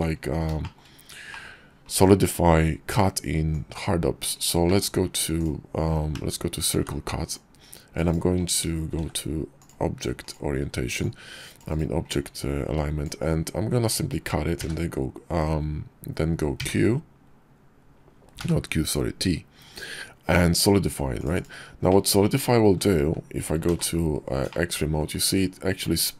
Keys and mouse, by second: 0.5 shift+middle click, 1.2 click, 3.4-4.1 drag, 4.5 d, 6.0 d, 7.1-8.0 drag, 8.8 shift+v, 10.8-11.6 drag, 11.9-21.1 drag, 21.7-22.5 middle drag, 23.5 alt+z, 24.3 middle click.